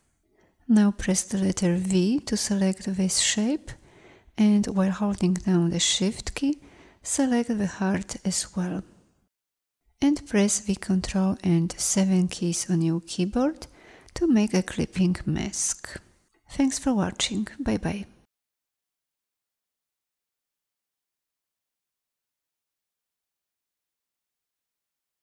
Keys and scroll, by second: 1.4 v, 10.7 ctrl+7, 18.6-25.2 typing.